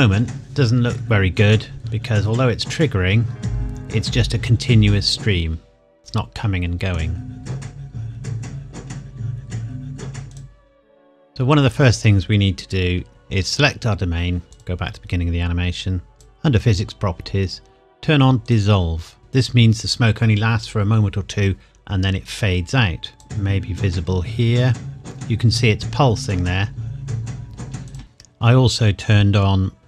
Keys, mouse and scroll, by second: 2.6-4.4 scroll up 1, 10.3 click, 13.0 Escape, 14.4 click, 16.8-18.5 scroll down 1, 18.5 click, 23.1 click, 27.9 click, 28.0 scroll down 1.